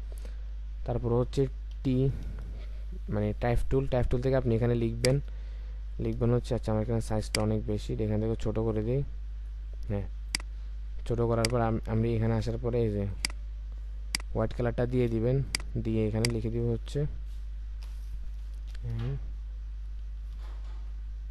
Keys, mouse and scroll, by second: 1.7 t, 18.7 m, 20.2 typing.